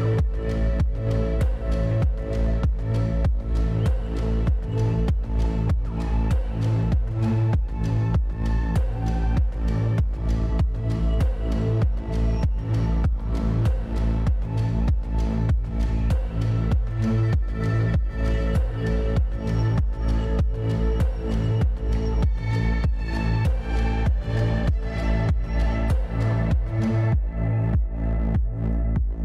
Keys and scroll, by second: 6.6-7.6 typing, 23.3-24.2 typing, 28.8-29.2 typing.